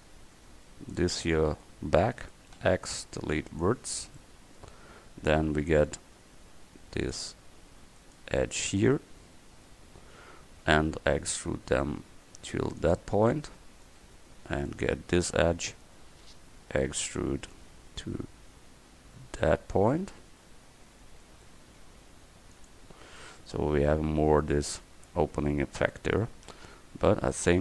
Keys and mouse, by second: 1.2-2.6 drag, 2.6 x, 7.1 click, 9.7 KP_1, 11.4 e, 13.3 click, 15.7 KP_1, 17.6 e, 26.4 Tab, 27.1 Tab.